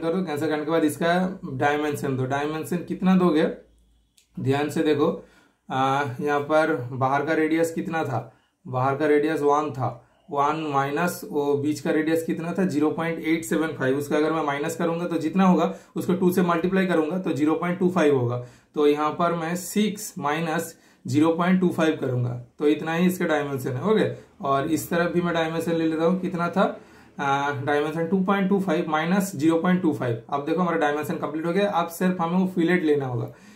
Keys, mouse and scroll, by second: 0.2 super+click, 1.2 super+click, 3.9 super+click, 3.9 typing, 6.0 click, 9.7 super+click, 12.5 super+Return, 13.2 super+click, 13.7 super+right click, 14.0 super+click, 16.6 super+click, 17.6 super+right click, 17.9 super+click, 18.4 typing, 24.6 super+click, 24.6 typing, 25.7 super+click, 30.8 super+Return, 31.1 super+right click, 31.8 super+click.